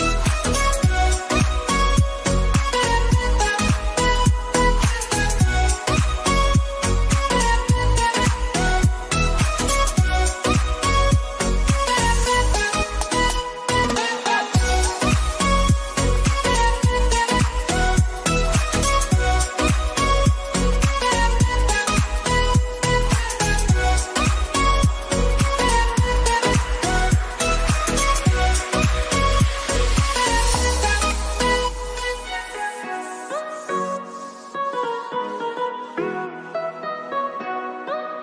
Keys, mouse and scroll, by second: 2.2 x, 2.7 click, 3.0 x, 3.8 click, 4.7 x, 5.2 click, 6.3 x, 7.0 click, 8.5 ctrl+f, 10.2 click, 13.1-14.4 shift+drag, 14.4 alt+shift+scroll up 1, 15.0 alt+scroll down 1, 15.4 alt+scroll up 1, 16.3-17.9 drag, 17.9-19.3 shift+drag, 19.3-21.2 drag, 24.3 click, 27.9 x, 28.3 x, 29.0 click, 30.0 x, 30.3 click, 31.9 ctrl+c, 33.5-38.2 drag.